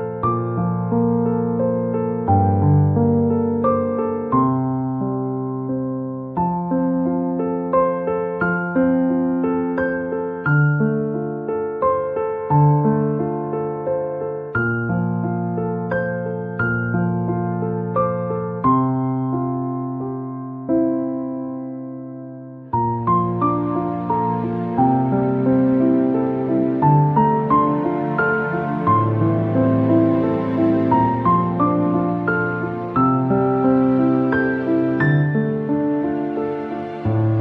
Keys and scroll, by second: 1.6 Return, 11.3 space.